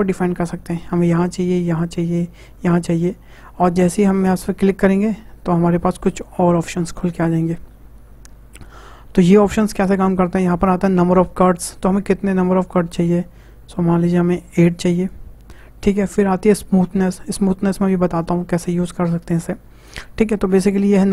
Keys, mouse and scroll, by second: 2.9-4.6 middle drag, 4.6-7.8 drag, 11.5-14.7 drag.